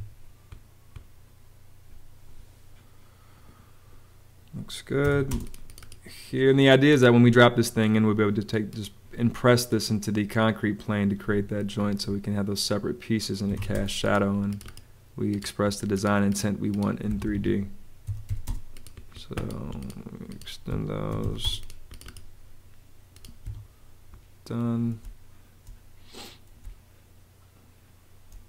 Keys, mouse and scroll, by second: 4.7-5.5 typing, 11.1 Escape, 13.1-14.0 typing, 17.0 Escape, 17.7-18.7 typing, 20.6 Escape, 20.8-21.6 typing, 23.3 Escape, 24.9 space, 26.5 space.